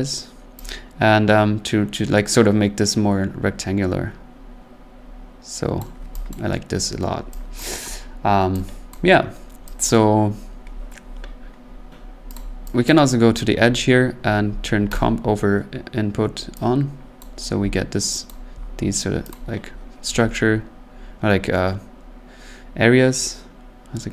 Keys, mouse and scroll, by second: 5.7 click, 6.3 click, 6.7-7.3 scroll, 7.6 click, 8.9 click, 9.2 middle click, 9.9 click, 12.3 click, 12.9 click, 14.9 click, 17.2 click, 18.2 click, 19.3 click.